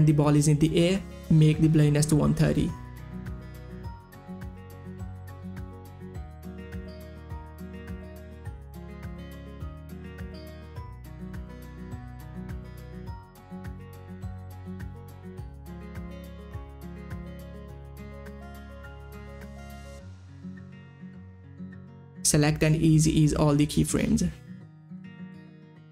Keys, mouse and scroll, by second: 1.1 click, 1.2 Down, 1.5 Left, 1.7 Down, 1.7 Left, 1.9 Down, 2.1 Up, 2.2 Right, 2.6 click, 3.1 1, 3.2 Return, 3.5 click, 3.9 Page_Down, 4.4 click, 4.5 1, 4.6 Return, 4.9 Page_Down, 5.3 click, 5.4 7, 5.6 Return, 6.6 Return, 7.1 Page_Down, 9.2-10.5 typing, 9.3 click, 10.3 click, 10.6 Return, 11.3 Return, 11.7 Page_Down, 11.8 Page_Down, 12.0-14.5 typing, 13.6 click, 13.9 Return, 14.3 click, 14.6 Return, 15.2 Page_Down, 15.7 Page_Up, 15.8 click, 16.0 1, 16.1 Return, 16.2 Page_Down, 16.6 click, 16.8 7, 16.9 Return, 17.1 Page_Down, 17.4 Page_Up, 17.7 click, 18.2 9, 18.4 Return, 18.6 Page_Down, 18.8 click, 19.0 7, 19.1 Return, 19.2 Page_Down, 19.6 Page_Up, 19.9 Page_Down, 20.6 click, 20.8 Page_Down, 21.2 Page_Up, 21.5 Page_Down, 22.0 click, 22.2 Page_Up, 22.3 Page_Down, 22.7 click, 23.9 click, 24.5 F9.